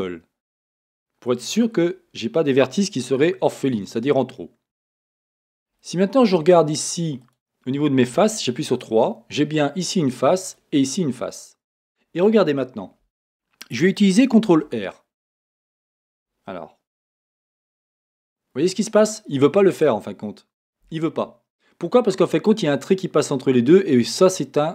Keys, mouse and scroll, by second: 1.0-6.8 middle drag, 4.7 Tab, 6.2 Tab, 6.7 click, 8.3 3, 8.7 click, 10.4 click, 14.5 ctrl+r.